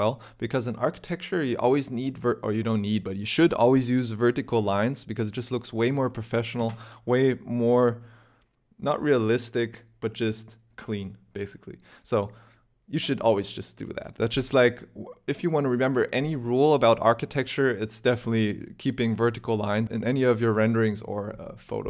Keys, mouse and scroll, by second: 0.8 click, 3.1 click.